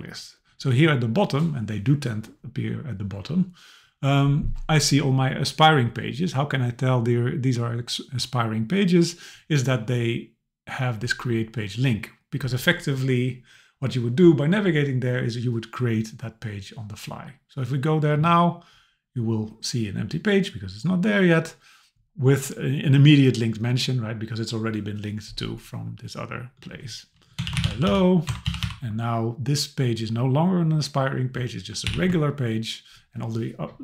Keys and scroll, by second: 28.3 BackSpace, 31.9 alt+h.